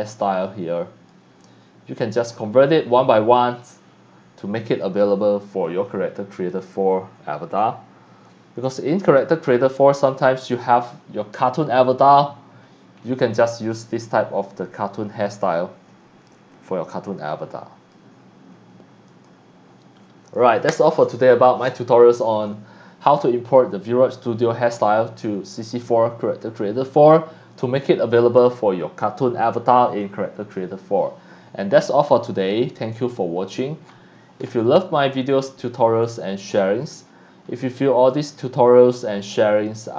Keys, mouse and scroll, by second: 1.1 click, 2.0 click, 2.3 scroll down 1, 2.9 middle click, 2.9 scroll up 1, 4.7 click, 5.6 middle click, 5.6 scroll up 1, 5.8-6.4 scroll down 2, 6.5-9.2 drag, 9.4 scroll down 1, 10.1 scroll down 1, 12.5-13.1 scroll up 2, 13.3 scroll down 1, 13.7-15.3 drag, 16.5-17.9 drag, 19.1 click, 33.0 click, 35.5 click, 38.1 click, 38.4-39.3 scroll down 1, 39.3 click, 39.8 scroll down 1.